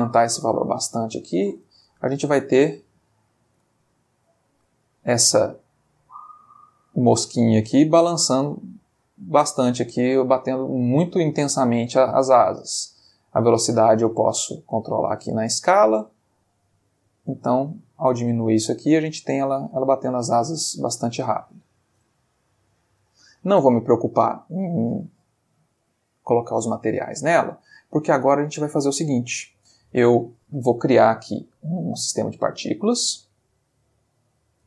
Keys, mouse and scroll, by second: 1.9 space, 2.8-3.5 middle drag, 3.8-4.8 ctrl+middle drag, 4.9-5.6 ctrl+middle drag, 6.9-8.0 middle drag, 11.9-13.9 drag, 15.9-19.2 drag, 21.4 click, 22.5 middle click, 23.3 middle click, 24.5 Escape, 25.1 middle click, 25.9-27.7 ctrl+middle drag, 27.8-28.3 ctrl+middle drag, 28.6-29.0 ctrl+shift+middle drag, 29.0 ctrl+shift+Escape, 29.6 ctrl+shift+click, 32.1 click, 33.4 click.